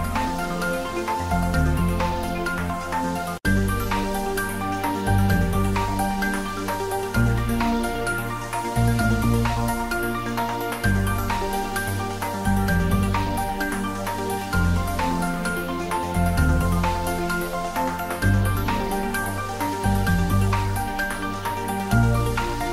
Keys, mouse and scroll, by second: 1.0 click, 1.1 middle click, 1.6 ctrl+middle click, 3.2 g, 3.9 click, 4.2 3, 4.5 click, 4.8 middle click, 5.5 shift+click, 5.7 middle click, 6.5 shift+click, 6.6 middle click, 7.5 shift+click, 8.6 middle click, 9.2 middle click, 9.8 alt+e, 10.2 click, 12.7 click, 13.8-15.0 middle drag, 15.0 g, 16.8 click, 17.2 r, 18.5 click, 18.6 ctrl+z, 19.3 g, 20.0 click, 20.3-21.5 middle drag, 21.5 click.